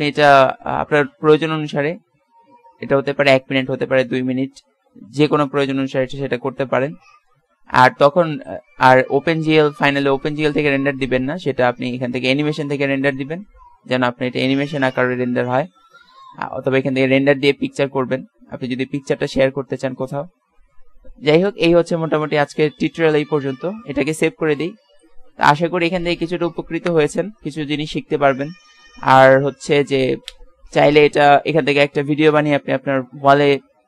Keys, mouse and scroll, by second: 0.0-1.0 drag, 13.0-14.0 middle drag, 14.2-18.3 middle drag, 24.1 ctrl+s.